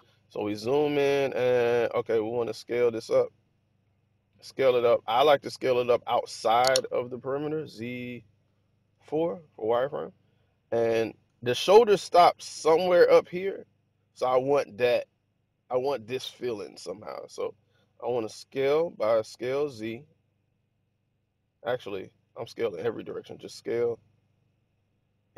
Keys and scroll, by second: 2.2 s, 6.7 z, 8.8 4, 19.2 s, 21.9 Escape, 22.9 s.